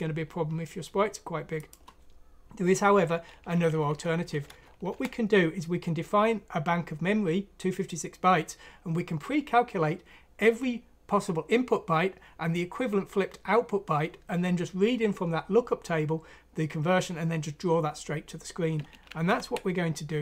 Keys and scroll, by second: 3.5 Down, 3.7 Down, 3.9 Down, 4.5 Home, 4.9 Delete, 19.3 ctrl+End.